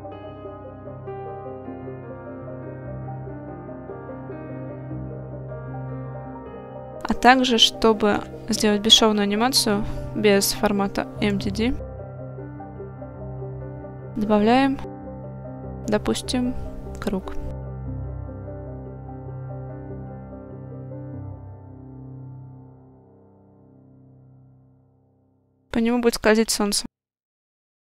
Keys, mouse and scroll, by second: 0.2 middle click, 1.2 click, 4.1 click, 4.7 click, 5.0-6.1 middle drag, 6.8 shift+middle drag, 7.3-7.7 middle drag, 8.2 KP_1, 9.2 shift+middle click, 11.3 click, 12.5 middle click, 15.2-17.1 drag, 18.2 KP_3, 19.2 r, 21.3 ctrl+click, 22.1 KP_1, 23.1 s, 25.2 click, 25.6 shift+middle drag, 26.5 shift+middle click.